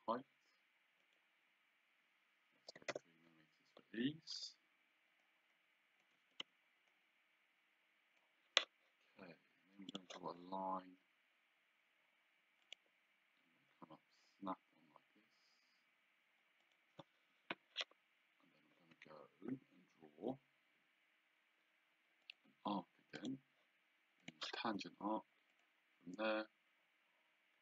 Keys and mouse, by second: 1.1 click, 2.8 KP_3, 3.0 Return, 5.3 click, 6.2 Escape, 7.0 click, 10.0 click, 12.7 click, 16.7 click, 17.4 Escape, 22.3 click, 24.3 click, 25.6 click.